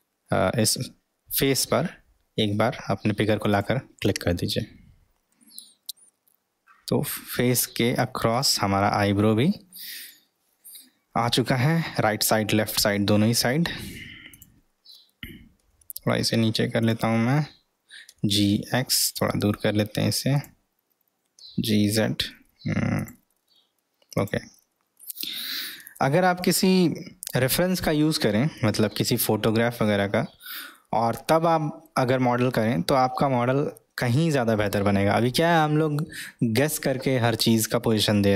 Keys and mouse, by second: 6.0-7.4 middle drag, 9.8 middle click, 14.4 click, 15.6 g, 18.1 g, 21.4 g, 24.1 click, 24.6-27.4 middle drag, 29.1-29.8 middle drag, 30.2-31.9 middle drag, 33.1-35.3 middle drag, 35.5-37.0 middle drag, 37.4-38.2 middle drag.